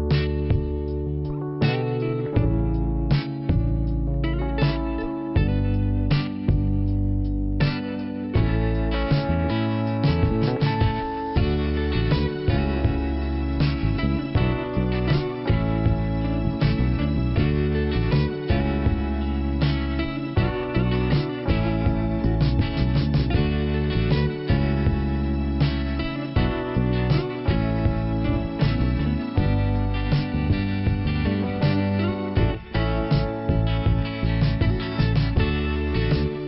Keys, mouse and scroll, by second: 1.1 click, 2.7 click, 5.5 middle click, 8.7 click, 10.8 click, 12.1 click, 14.2 scroll up 1, 14.4 click, 17.4 click, 21.9 click, 22.2 click, 25.0 click, 29.1 click, 30.9 click, 34.3 click, 34.5 click, 34.6 double click.